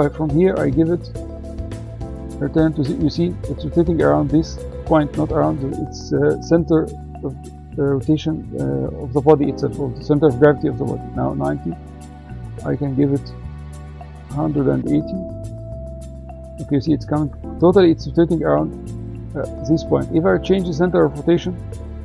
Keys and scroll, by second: 1.6 BackSpace, 9.5 9, 13.5 Right, 13.9-15.8 typing.